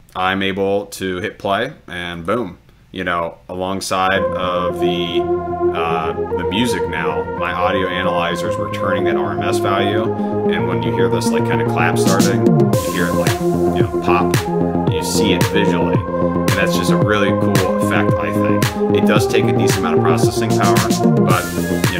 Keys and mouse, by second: 2.2 click.